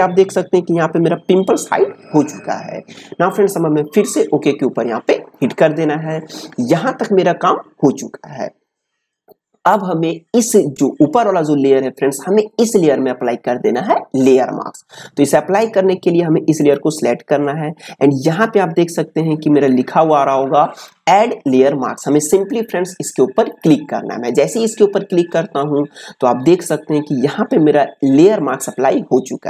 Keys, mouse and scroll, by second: 5.4 click, 16.6 click, 23.5 click.